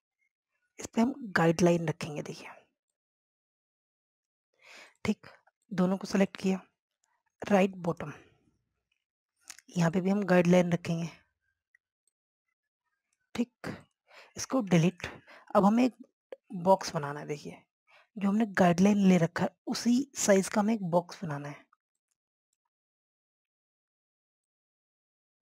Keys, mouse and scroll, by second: 1.0 scroll up 1, 1.9-5.6 drag, 5.6 scroll down 1, 5.9 click, 6.2 scroll down 1, 6.7 click, 9.7 scroll up 1, 10.9-14.4 drag, 14.4 scroll down 1, 14.9 click, 15.3 scroll down 1, 16.0 click, 19.5 scroll up 1, 20.1 scroll down 1, 22.0 scroll up 1, 22.8 click, 23.8 scroll down 1, 24.3 scroll up 1.